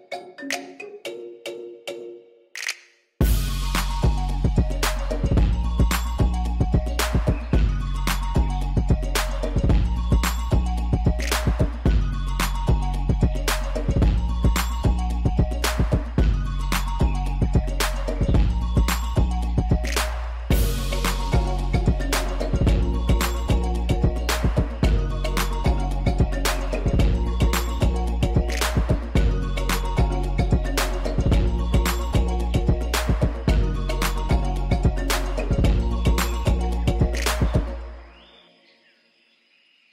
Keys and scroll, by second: 0.7-2.2 typing, 2.4 Return, 6.1 Tab, 6.9 alt+a, 9.0 Tab, 10.8 shift+z, 13.6 s, 13.8 y, 16.3 s, 16.4 x, 17.4 shift+z, 19.6 1, 19.8 shift+z, 22.0 1, 22.9 s, 23.8 shift+z, 24.4 Tab, 29.1 shift+s, 29.8 shift+a, 31.4 g, 31.5 z, 32.4 5, 32.7 Return, 34.6 f, 35.3 8, 35.5 b, 35.7 6, 35.9 Return.